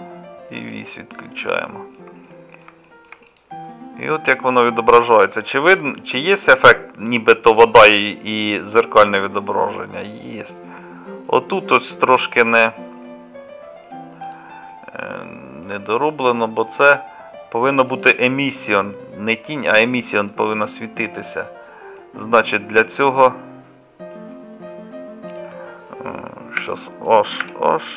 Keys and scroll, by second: 26.6 h, 27.5 h.